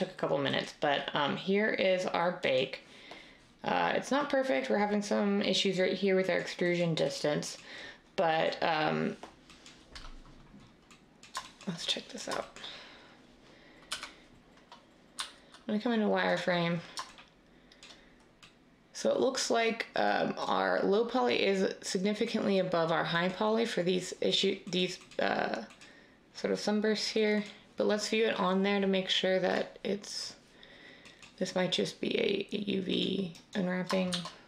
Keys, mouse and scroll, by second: 13.9 3, 15.1 z, 34.1 a.